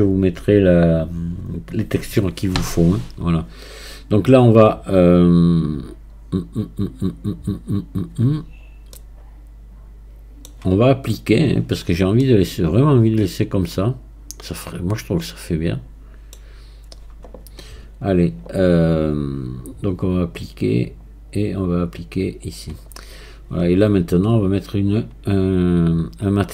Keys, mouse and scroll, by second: 9.0-12.0 middle drag, 12.2-15.2 middle drag, 20.0-26.5 drag.